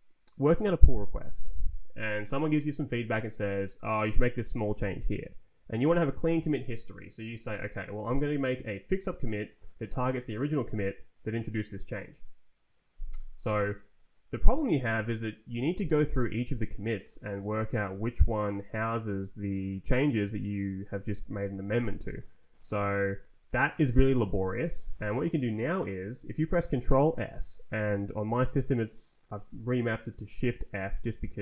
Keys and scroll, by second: 15.7 Right, 16.4 Down, 17.1 Down, 17.8 Down, 22.9 Down, 23.4 Down, 24.1 Up, 24.7 Left.